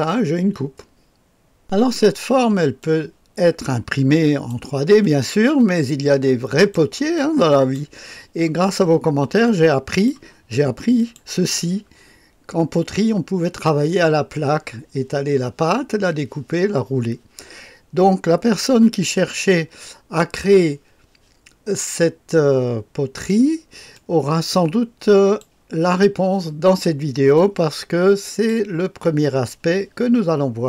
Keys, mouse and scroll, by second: 0.1-4.5 drag, 5.1-6.8 drag, 7.2 click, 9.5 click, 11.0 click, 20.2-23.3 drag, 23.9-25.4 drag, 27.4-28.5 drag.